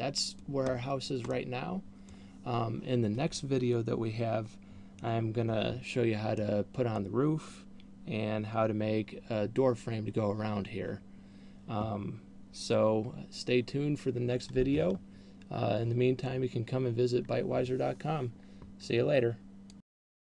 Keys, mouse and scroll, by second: 1.0-1.7 scroll down 3, 1.8 middle click, 6.8 middle click.